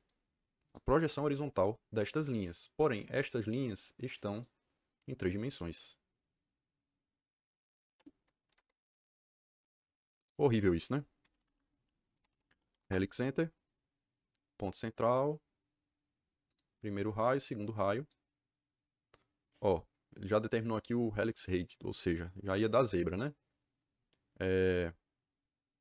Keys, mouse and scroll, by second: 0.6 click, 1.0 Return, 4.2 click, 8.4 u, 8.5 KP_Enter, 10.1 click, 11.3 Escape, 11.4 Escape, 11.8-13.2 typing, 14.4 click, 16.4 click, 17.3 click.